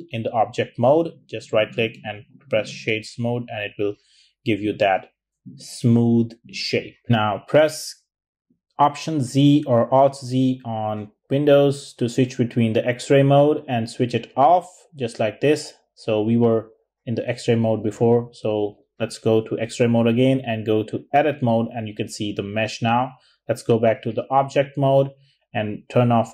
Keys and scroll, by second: 5.4 typing, 8.1 alt+z, 9.7 alt+z, 10.4 alt+z, 10.9 alt+z, 16.7 alt+z, 25.0 alt+z.